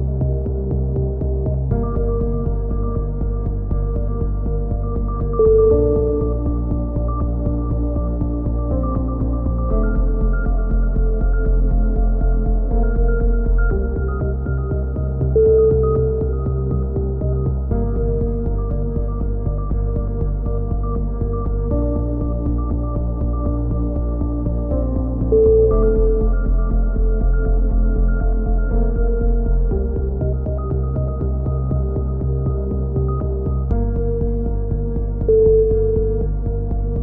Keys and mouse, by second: 1.7 click, 1.7 z, 2.6 KP_3, 3.2 z, 5.3 middle click, 5.5 z, 5.8 click, 8.3 KP_7, 9.6 z, 11.0 z, 11.5 click, 13.4 middle click, 13.7-14.8 drag, 14.1-15.5 right drag, 15.5 KP_3, 17.1 middle click, 17.7 KP_7, 17.8 z, 19.4-22.5 middle drag, 20.9 KP_3, 23.4 e, 24.5 click, 25.4 s, 26.7-28.0 drag, 28.6 click, 31.2 click, 32.8 click, 35.2 click, 35.7 a, 36.2 c.